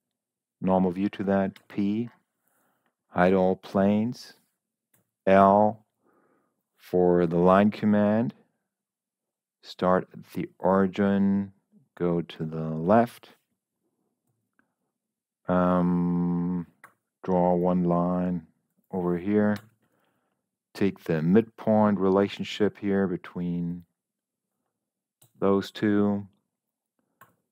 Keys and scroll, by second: 1.5 p, 4.8 l, 14.6 Escape, 16.7 l, 19.4 Escape, 25.6 Escape, 27.1 d.